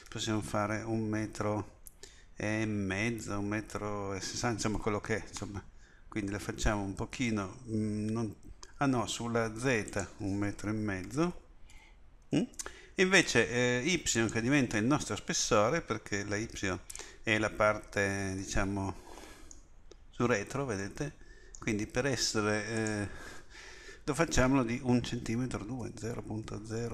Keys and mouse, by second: 9.9-15.3 drag, 18.5 middle click, 22.8-25.0 drag.